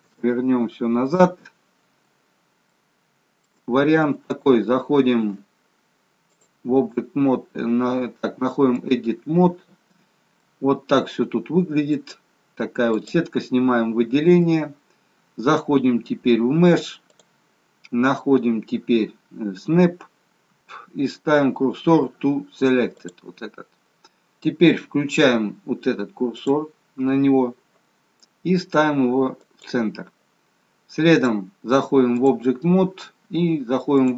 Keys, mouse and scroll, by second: 0.0 ctrl+z, 3.2 shift+middle click, 3.6-4.1 scroll up 5, 4.2 shift+middle click, 6.3 click, 10.3 middle click, 12.4-12.9 scroll down 2, 13.0 click, 14.3 middle click, 17.2 click, 26.3 click, 31.1 click.